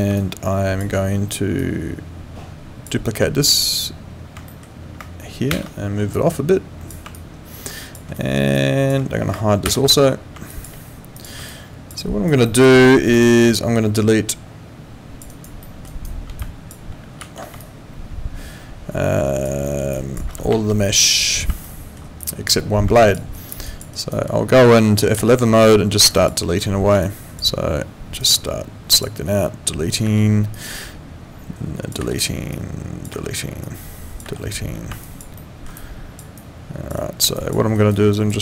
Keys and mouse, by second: 0.2 alt+click, 1.6 click, 4.5 alt+middle click, 5.5 ctrl+d, 6.1 click, 7.1 alt+click, 8.2 alt+middle click, 8.5 alt+click, 9.6 ctrl+h, 10.5 alt+click, 11.5 alt+click, 12.0 alt+right click, 12.4 alt+middle click, 12.9 alt+right click, 13.2 alt+click, 15.3 alt+right click, 15.6 alt+middle click, 15.9 alt+right click, 16.4 alt+click, 17.2 ctrl+z, 17.6 alt+click, 19.6 alt+middle click, 19.9 alt+click, 21.2 click, 21.6 alt+middle click, 22.2 alt+click, 23.0 alt+click, 23.3 alt+right click, 23.6 alt+click, 23.9 alt+right click, 25.2 F11, 26.1 alt+click, 27.0 click, 28.2 click, 30.1 Delete, 30.5 click, 32.0 Delete, 32.5 click, 33.1 Delete, 33.6 click, 34.2 Delete, 35.0 alt+click, 35.4 alt+middle click, 35.8 alt+click, 37.0 alt+right click, 37.4 alt+click, 37.8 alt+right click, 38.1 alt+click.